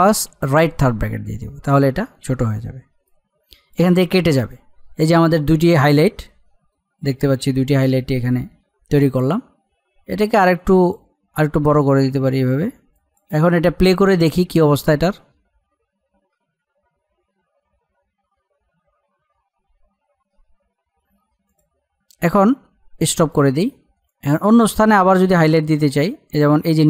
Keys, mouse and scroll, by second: 0.5 alt+], 3.1-9.7 drag, 9.7-10.1 alt+scroll up 1, 10.1-14.1 drag, 21.5-26.8 drag.